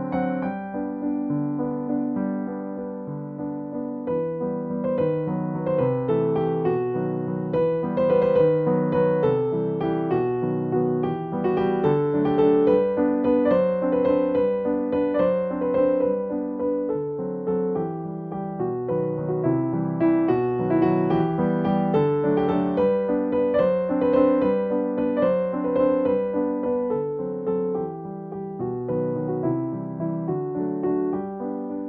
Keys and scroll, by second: 0.0 scroll down 1, 0.4-0.9 scroll up 1, 3.1 scroll down 1, 3.3 scroll up 1, 3.6-4.1 scroll down 1, 4.2-4.8 scroll down 1, 5.8-6.4 scroll up 1, 7.1-7.5 scroll down 1, 7.5 scroll up 1, 8.4 scroll down 1, 14.4 scroll up 1, 16.3-16.8 scroll up 1, 19.8 scroll down 1, 20.2 scroll up 1, 20.3-20.6 scroll down 1, 20.6 scroll up 1, 22.0 scroll down 1, 22.3 scroll up 1, 23.0-23.6 scroll down 1, 23.8 scroll down 1, 23.9-24.5 scroll up 1, 25.3 scroll down 1, 25.5 scroll up 1.